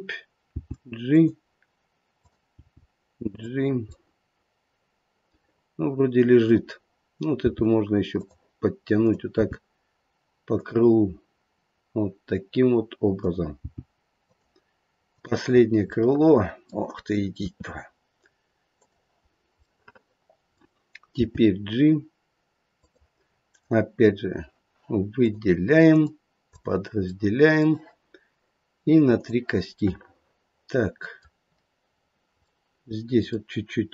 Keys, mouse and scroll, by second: 0.5 g, 2.2 click, 2.5 g, 3.9 middle click, 7.4 g, 8.9 click, 9.4 g, 13.1 click, 13.5 g, 15.0 click, 15.5-15.9 scroll down 2, 15.9 middle click, 17.4 e, 19.2-20.4 scroll up 2, 19.6 middle click, 21.2 g, 23.4 right click, 25.2 click, 25.9 right click, 27.2 middle click, 29.1 click, 29.8 middle click, 31.8 scroll down 2, 32.5 middle click, 33.2 middle click.